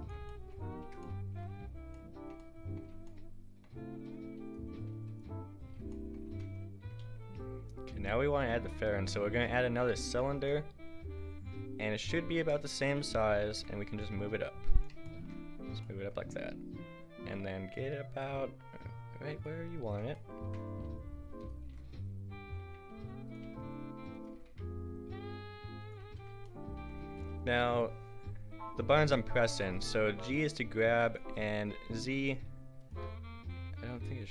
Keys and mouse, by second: 0.8 Tab, 1.5 a, 4.1-6.3 drag, 6.3 a, 7.1 shift+a, 13.5 g, 16.2-19.1 drag, 16.2 g, 20.7 a, 21.4 click, 21.7 g, 23.4 a, 24.3 g, 26.0 a, 29.7-32.0 drag, 30.2 g, 32.0 g, 33.0 z, 33.6 z, 33.9 g.